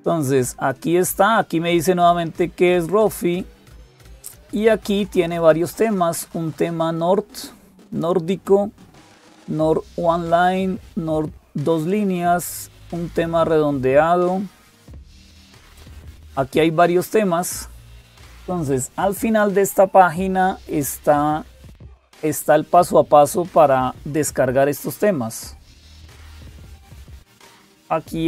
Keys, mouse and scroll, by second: 0.0-28.2 typing.